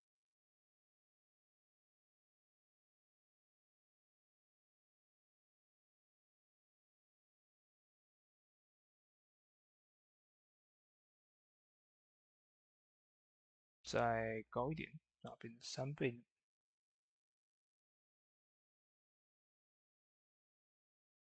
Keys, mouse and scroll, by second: 15.6 click, 15.6-20.9 drag.